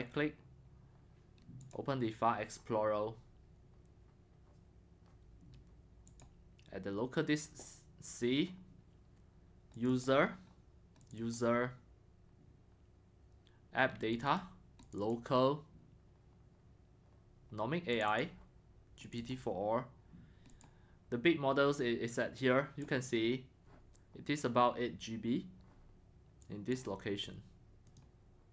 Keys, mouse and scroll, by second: 0.0-1.7 right drag, 1.7-17.8 drag, 18.1-28.5 drag.